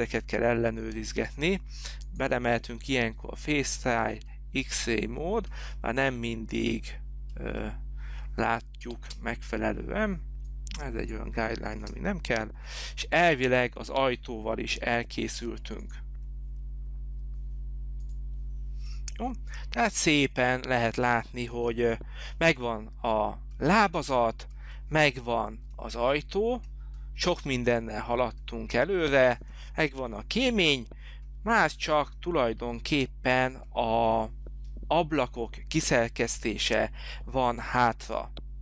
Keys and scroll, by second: 9.2 space, 12.1 Delete, 21.8 Delete, 30.2 h.